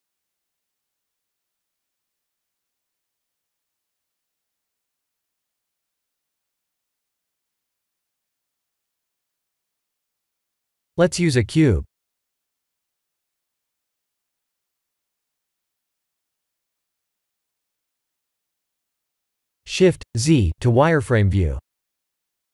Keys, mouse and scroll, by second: 3.5 click, 4.1 click, 4.6 r, 6.1 g, 11.8 click, 11.9 click, 13.5 click, 14.3 shift+a, 18.2 shift+z, 19.9 s, 21.7 g.